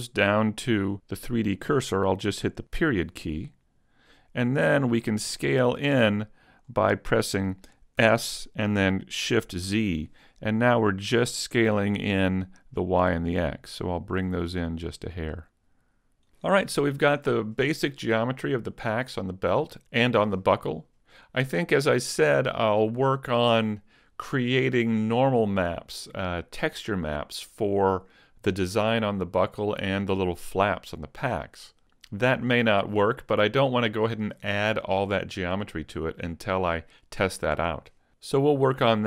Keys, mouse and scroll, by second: 2.8 ., 4.2 scroll up 1, 4.8-5.7 scroll up 2, 5.7 scroll down 1, 5.8 scroll down 1, 6.7-8.0 scroll up 2, 8.0 s, 16.4 click.